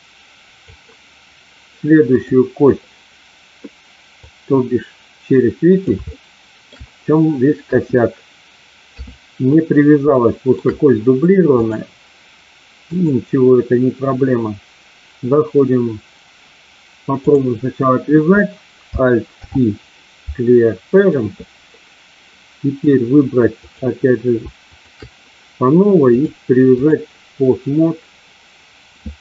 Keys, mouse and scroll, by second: 2.1 click, 4.1-5.8 drag, 6.1 shift+middle click, 7.6 KP_1, 8.8 KP_3, 10.2 shift+middle click, 11.6-13.1 drag, 19.2 alt+p, 23.6 click, 24.7 shift+click, 26.0 click.